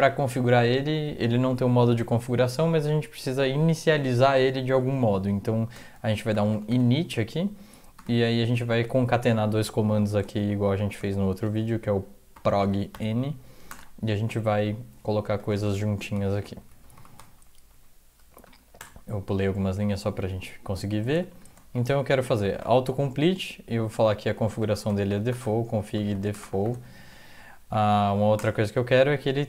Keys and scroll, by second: 5.9-6.8 typing, 7.9 typing, 10.4 typing, 11.4-13.9 typing, 15.0-19.3 typing, 16.7 Right, 18.4 End, 21.0-26.7 typing, 27.6 Right, 28.1-28.8 typing.